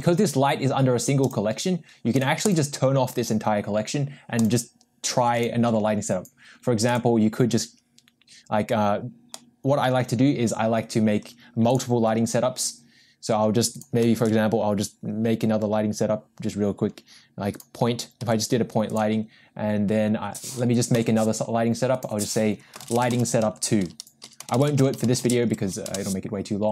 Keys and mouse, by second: 1.2 click, 2.1 click, 2.5 click, 4.4 click, 5.4 click, 6.9 click, 9.6 middle click, 11.7 click, 14.1 shift+a, 18.2 g, 20.9 m.